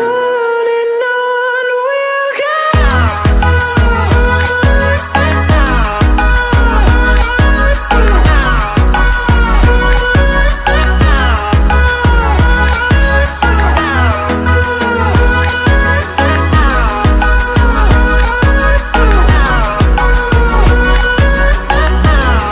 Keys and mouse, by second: 1.6 s, 3.2 s, 4.8 middle click, 5.4 s, 6.4 click, 7.2 r, 8.4 click, 9.0 r, 10.0 click, 10.8 click, 11.1 click, 11.7 click, 12.3 middle click, 13.0 s, 13.6 middle click, 14.2 click, 14.5 click, 15.1 click, 15.9 click, 16.5 click, 16.7 middle click, 16.8 click, 17.3 middle click, 18.2 middle click, 18.8 click, 19.5 click, 20.9 middle click, 21.4 click, 22.0 click.